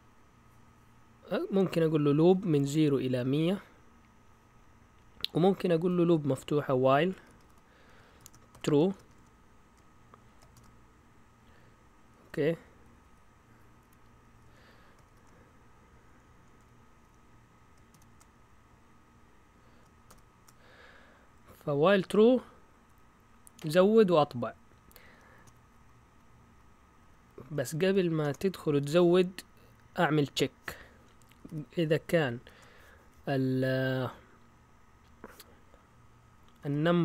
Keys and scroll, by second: 6.8-11.0 typing, 12.2 Delete, 12.8 Down, 13.0 Down, 13.8 End, 14.4 Return, 15.1 }, 16.4 Escape, 17.0 Up, 17.9 shift+v, 18.3 Up, 18.9 typing, 20.0 >, 24.3 Down, 24.9 Up, 25.1 Up, 25.4 Right, 25.6 Right, 25.8 Right, 25.9 Right, 26.4 Right, 27.1 Left, 27.8-28.2 typing, 31.1-32.4 typing, 36.3-37.0 typing.